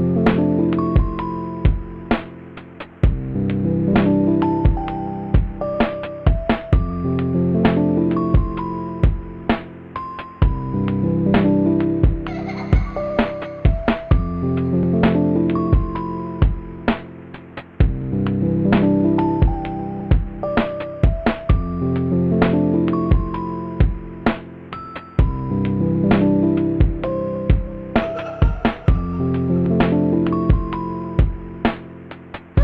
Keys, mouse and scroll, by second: 0.0-1.3 typing, 0.6 ctrl+z, 2.2 ctrl+z, 3.3 right click, 3.5 space, 3.7 ctrl+z, 5.3-7.6 typing, 5.5 ctrl+z, 6.5 ctrl+z, 8.8 ctrl+z, 9.3 ctrl+z, 10.4 b, 18.8 right click, 19.8 right click.